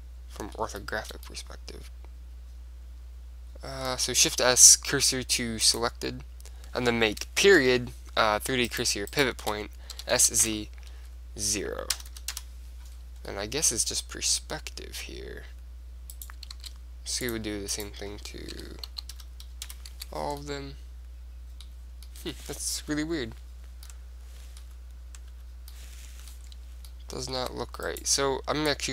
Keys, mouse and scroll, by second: 4.2 shift+s, 7.7 ., 8.8-11.0 right drag, 10.1 s, 13.1 middle click, 13.6-15.3 middle drag, 16.3-19.5 right drag, 16.7 shift+s, 18.6 s, 20.2 Tab, 20.4-23.9 middle drag, 22.9 KP_1, 24.1 middle click, 24.7 KP_5, 25.4 KP_5, 26.1-28.0 middle drag, 27.5 Tab, 28.0 click.